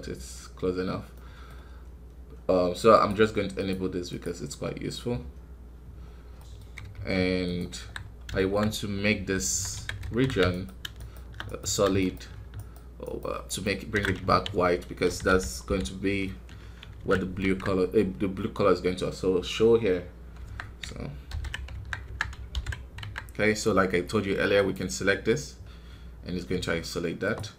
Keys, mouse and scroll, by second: 5.9 scroll up 2, 6.3 middle click, 6.8 f, 7.7 KP_1, 7.9 scroll up 2, 8.3 shift+middle click, 8.5 scroll up 1, 9.3 Tab, 9.7 alt+a, 10.4-14.2 alt+right drag, 14.2 ctrl+z, 15.0 ctrl+KP_Add, 15.2 ctrl+KP_Add, 15.6 ctrl+KP_Add, 16.9 ctrl+z, 17.3 Tab, 20.3 Tab, 21.2 ctrl+KP_Add, 21.6 Tab, 22.0 Tab, 22.4 ctrl+KP_Add, 22.9 Tab, 24.5-27.3 drag, 27.3 space.